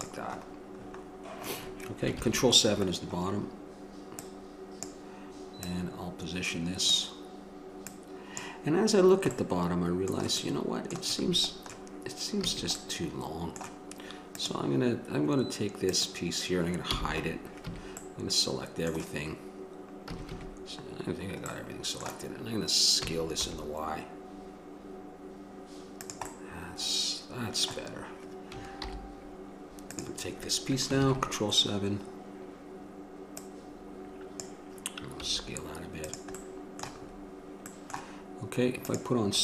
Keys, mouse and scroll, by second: 2.4 ctrl+KP_1, 4.1-8.5 drag, 9.3 middle click, 11.4 a, 12.7 a, 14.6-17.8 drag, 17.1 h, 17.8 middle click, 17.8 a, 20.3 a, 20.5 a, 23.2 s, 29.0 alt+h, 31.2 ctrl+KP_1, 35.5 s, 36.6-39.4 drag.